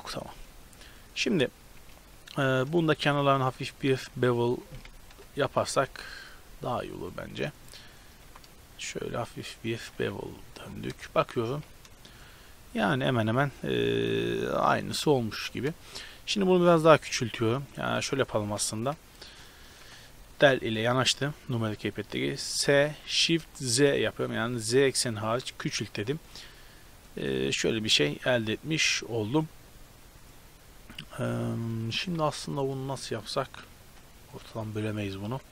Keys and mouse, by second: 0.1-2.7 middle drag, 2.7-5.2 right drag, 5.2 click, 5.2 KP_0, 5.4-5.9 drag, 5.9 KP_Decimal, 6.4-8.2 middle drag, 8.2 ctrl+b, 10.0 a, 10.6 click, 10.9 KP_0, 11.1 click, 11.5 z, 14.0 Tab, 14.9 z, 16.5 s, 17.9 s, 19.8 KP_Decimal, 22.7 s, 26.5-28.9 middle drag, 32.0 right click, 32.2 Tab, 32.2-33.5 middle drag, 33.8 ctrl+r.